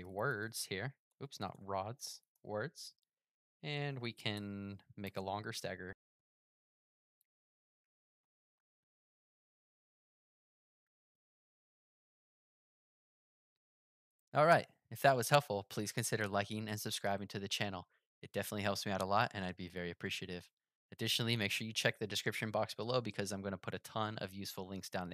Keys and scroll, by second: 10.8 super+r.